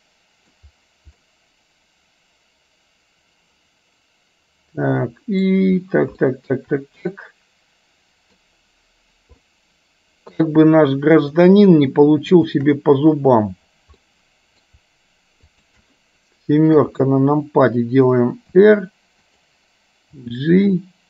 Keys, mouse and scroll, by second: 1.2-5.6 middle drag, 6.4 shift+middle click, 7.2-8.4 middle drag, 9.5-10.5 middle drag, 11.5 click, 12.5 shift+click, 14.1 middle click, 15.6 shift+click, 16.9 KP_7, 18.6 r, 20.2 g.